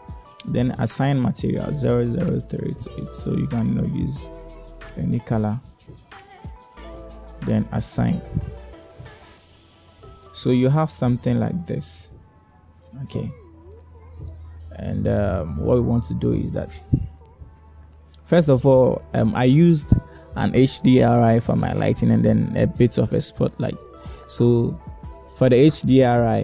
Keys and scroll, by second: 10.4 Tab.